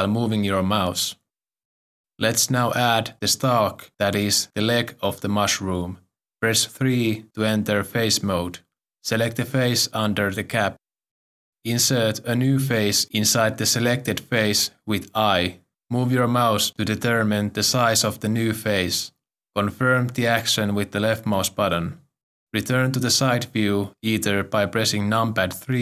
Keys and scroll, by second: 6.6 3, 15.0 i, 25.7 3.